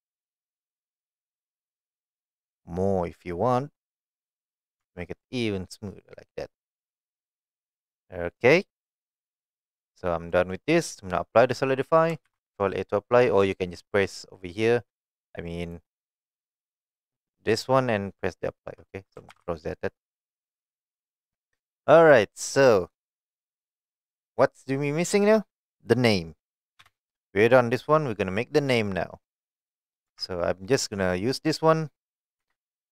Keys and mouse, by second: 4.2 click, 4.8 Tab, 5.2-5.8 middle drag, 7.1-7.7 middle drag, 8.4-9.4 middle drag, 10.3 middle drag, 12.3 ctrl+a, 15.0-15.7 drag, 17.5-18.7 drag, 19.3 ctrl+z, 20.2 middle click, 20.7 click, 21.3-22.2 middle drag, 26.8 KP_1, 30.1 Tab, 30.9 middle click, 31.5 click, 32.4 3.